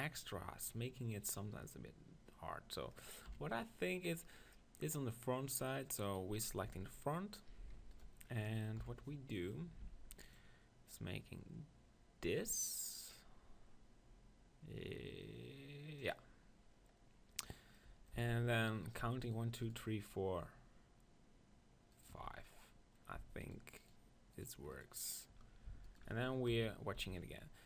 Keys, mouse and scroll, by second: 0.2-3.3 middle drag, 3.3 KP_1, 5.6 middle click, 6.0-7.6 drag, 6.7 Tab, 7.6 right click, 7.8 middle click, 7.9 right click, 8.2-9.7 drag, 8.9 KP_1, 9.7-11.7 middle drag, 9.8 ctrl+r, 16.1-17.9 drag, 17.9-21.3 middle drag, 18.7 z, 18.8-21.3 drag, 21.3-22.5 right drag, 22.5-26.4 drag, 22.5-26.4 middle drag, 26.4-27.6 right drag, 26.6 KP_1, 27.0 z.